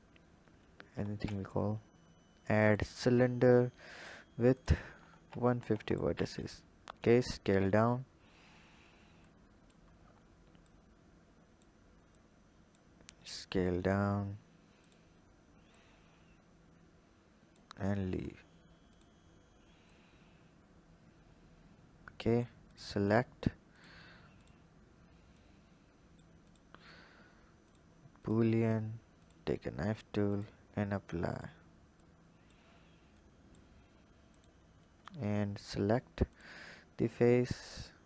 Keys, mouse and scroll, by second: 0.1-0.7 scroll up 2, 0.7-1.2 scroll up 2, 1.2 shift+a, 4.0 click, 4.6-5.9 drag, 6.4 click, 6.9 s, 8.2-9.2 scroll up 2, 9.2 click, 9.9 scroll up 1, 10.6 click, 12.1 click, 15.7 click, 17.9-18.9 scroll down 2, 18.9 drag, 19.9 click, 22.7 click, 23.8 click, 24.4 click, 25.4 click, 26.5 click, 27.6-29.2 drag, 31.2-32.0 drag, 33.1 click, 33.8-34.3 scroll up 4, 34.3 click, 35.6 Tab, 36.2 click, 37.1 click.